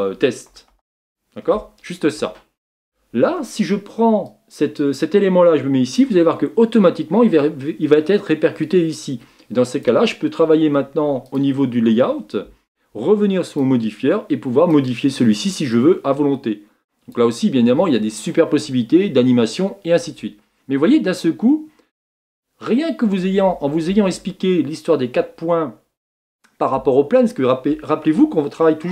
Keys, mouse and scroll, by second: 5.9-11.4 drag, 14.9-28.9 drag.